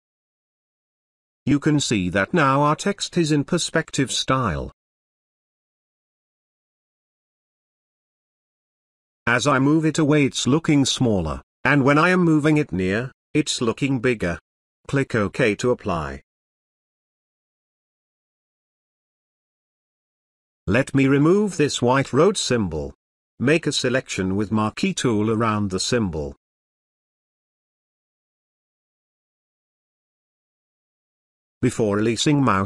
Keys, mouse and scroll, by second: 17.1 click, 25.4 click, 25.4 click, 29.1-32.6 drag, 32.0 space.